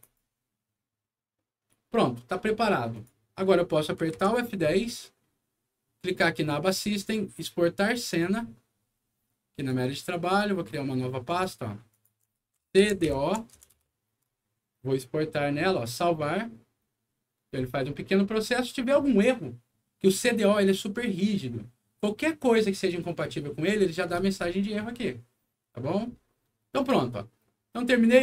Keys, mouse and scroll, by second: 2.9 click, 3.6 middle click, 4.1 F10, 6.4 click, 8.0 click, 9.5 click, 10.2 right click, 11.2 click, 11.8 click, 12.5 shift+c, 12.8 shift+d, 13.5 Return, 15.6 click, 27.7 click.